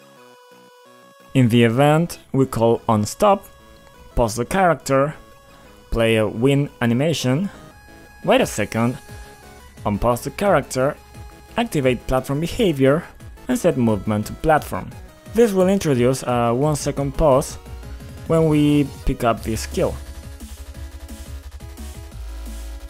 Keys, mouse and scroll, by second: 0.7 click, 2.0 click, 2.0 double click, 3.1 double click, 3.3 double click, 4.5-4.9 typing, 5.4 Return, 5.6 Return, 10.4 click, 11.6 click, 15.5 click, 16.5 click, 16.7 click, 16.7 double click, 18.7-19.7 typing, 20.8 click, 21.0 double click, 21.4 double click, 21.7 double click, 21.8 double click.